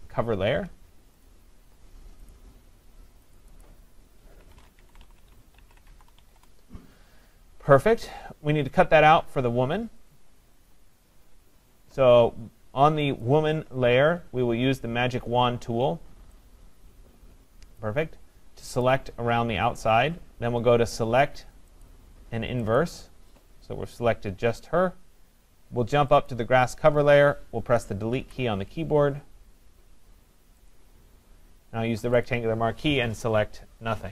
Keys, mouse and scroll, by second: 1.3 click, 2.3 click, 3.4 click, 3.6 click, 4.6-6.2 typing, 6.4 Return, 10.1 click, 10.7 click, 13.3 click, 17.8 click, 18.9 click, 22.8 click, 26.3 click, 28.2 Delete, 30.7 click, 32.3 click.